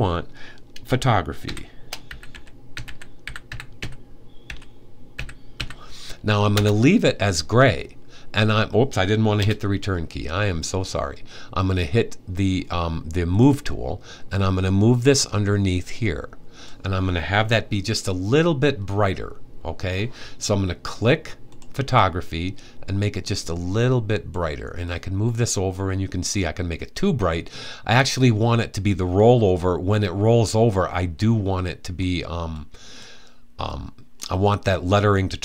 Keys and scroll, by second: 1.1-5.2 typing.